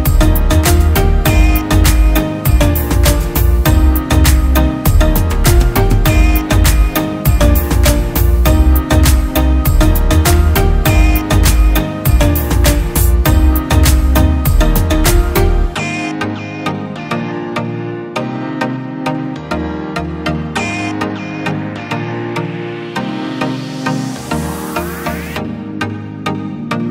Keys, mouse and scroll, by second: 24.1 ctrl+t, 25.2 alt+shift+click.